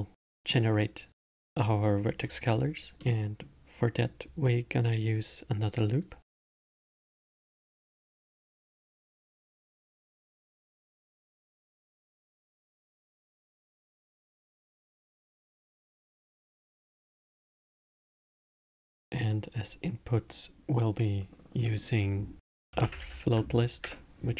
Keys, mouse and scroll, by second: 3.0-6.0 middle drag, 6.0-7.7 drag, 8.5 click, 9.1-12.1 drag, 16.8-19.6 middle drag, 19.6-22.6 drag.